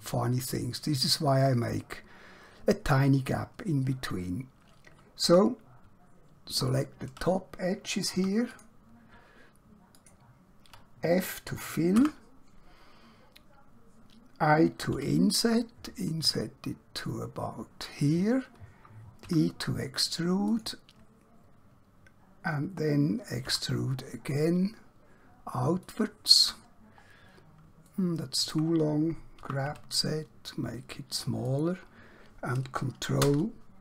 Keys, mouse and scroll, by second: 5.3 2, 6.7 alt+click, 8.1 2, 8.6 click, 10.0 alt+click, 11.9 f, 14.9 i, 18.0 click, 19.2 e, 20.6 click, 23.5 e, 25.9 click, 26.8-27.1 scroll down 1, 27.1-27.7 scroll up 1, 27.9 shift+middle click, 29.5 g, 29.7 z, 31.5 click, 33.2 ctrl+KP_Add.